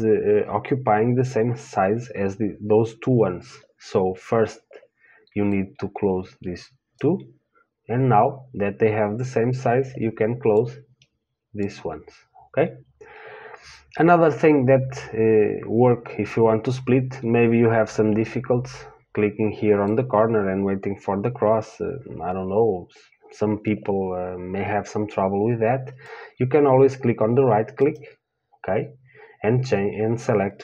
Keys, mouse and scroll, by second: 6.1-22.4 drag.